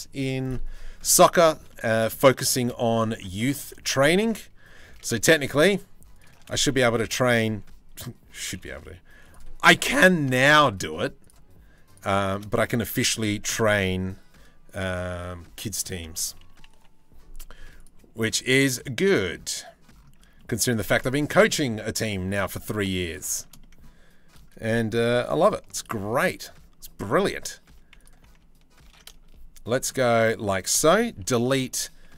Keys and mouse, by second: 0.7 middle click, 1.3 middle click, 2.1 shift+middle click, 2.8 2, 3.6 s, 6.0 s, 6.2 s, 8.1 g, 12.6 Delete, 15.3 click, 16.4 Delete, 18.2 click, 18.9 middle click, 19.4 middle click, 19.9 Tab, 21.4 Tab, 23.0 shift+middle click, 23.2 middle click, 24.7 3, 25.4 alt+click, 27.3 2, 28.5 ctrl+b, 30.8 Delete.